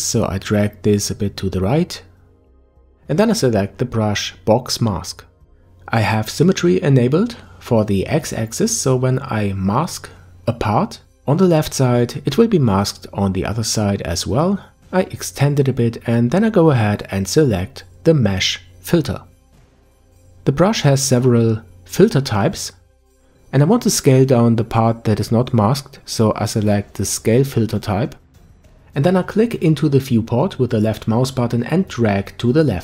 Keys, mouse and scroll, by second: 0.9-3.9 drag, 4.5 click, 9.1 click, 14.1 click, 20.8 click, 23.9-26.9 drag, 26.9-29.4 middle drag, 29.4 click.